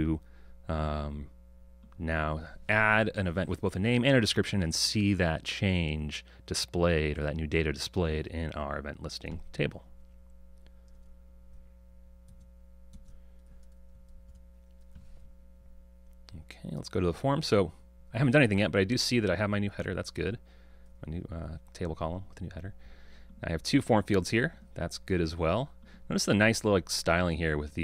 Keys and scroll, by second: 2.0 ctrl+r.